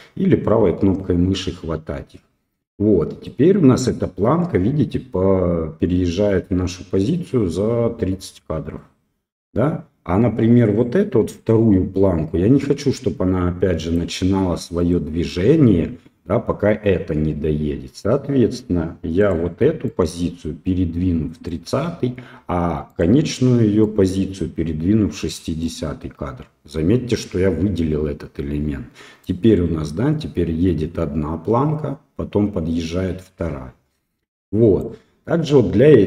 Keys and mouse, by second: 3.3-14.0 drag, 14.8 right click, 19.2 right click, 19.9-21.5 right drag, 22.9 right click, 23.8-25.6 right drag, 29.2-34.8 right drag.